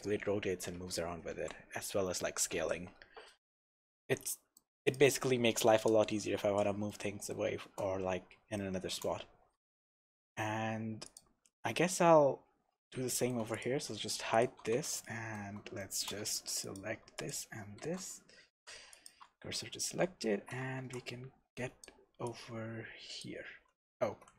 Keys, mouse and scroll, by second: 0.9 Escape, 1.7 s, 2.7 Escape, 3.2 scroll down 1, 4.1-4.9 middle drag, 4.9 click, 5.1-5.7 scroll up 1, 5.7 KP_0, 6.2-6.9 scroll up 1, 6.9-11.1 shift+middle drag, 8.0-8.6 scroll down 1, 9.2 scroll down 1, 11.1 click, 11.6 scroll up 2, 13.1-13.5 shift+middle drag, 13.5 click, 13.7 h, 14.0 scroll up 1, 14.3 click, 14.6 Tab, 15.0-16.6 shift+middle drag, 16.2 3, 16.6 click, 17.2 shift+click, 17.8 shift+s, 19.5-22.2 middle drag, 20.4 alt+a, 20.8 shift+b, 22.2 click, 24.1 alt+a.